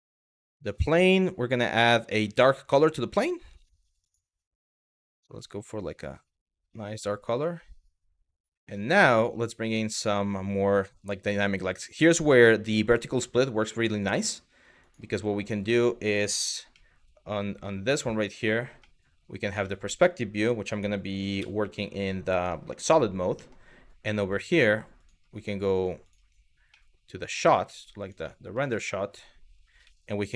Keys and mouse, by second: 0.1 click, 0.8 click, 3.7 click, 4.6 click, 8.5 click, 14.5 click, 18.4-19.0 middle drag, 19.3 shift+middle click, 21.0 z, 23.0 middle click, 24.0 click, 24.7 click, 25.7 click, 28.4 shift+middle click, 29.5 z.